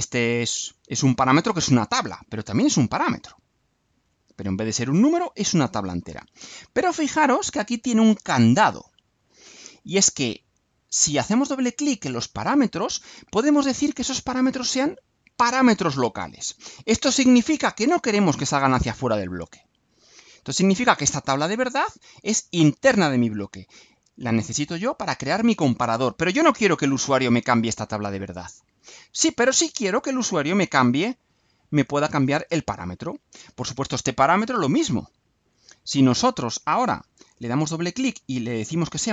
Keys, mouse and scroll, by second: 11.2 click, 17.8 click, 34.2 click, 35.7 click, 36.7 click, 38.7 click.